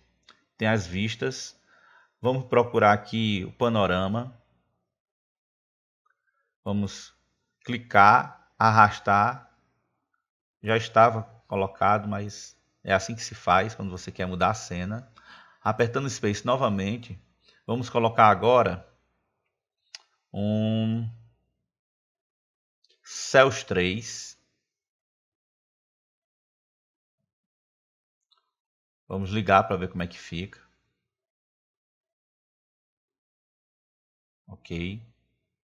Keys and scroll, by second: 17.1 space.